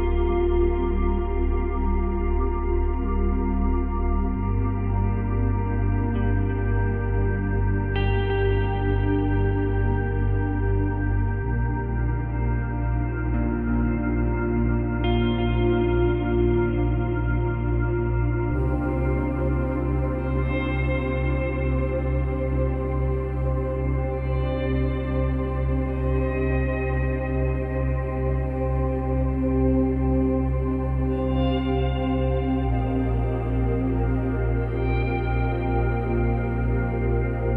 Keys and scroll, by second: 8.5 space, 10.0 space, 16.3 space, 17.9 space, 30.8 space, 34.5 space.